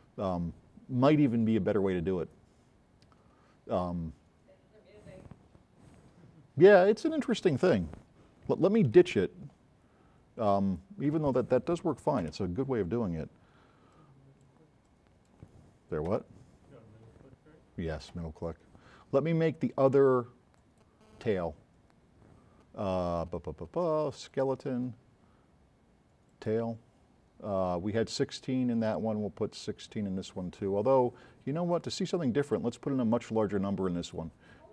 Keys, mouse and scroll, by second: 13.9-14.6 right drag, 14.9 right click, 20.6 click, 24.3 click, 26.3 click, 28.2 click.